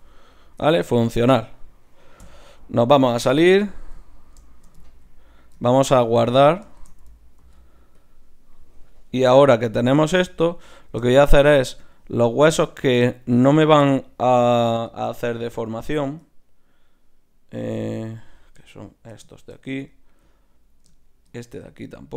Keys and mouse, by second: 2.3 KP_Divide, 3.2 z, 4.0 click, 7.4 ctrl+s, 9.2 Tab, 11.7 Tab, 12.4-14.8 drag, 14.8-16.2 right drag, 16.2 click, 17.2-19.0 middle drag, 19.0-20.6 drag, 20.6 middle click, 21.1-22.1 drag, 21.7 z.